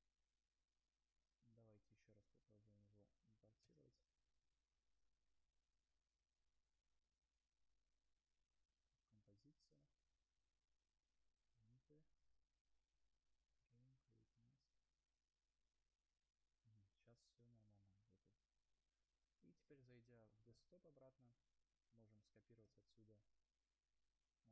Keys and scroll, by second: 2.2 ctrl+a, 6.1 shift+Delete, 7.6 Return.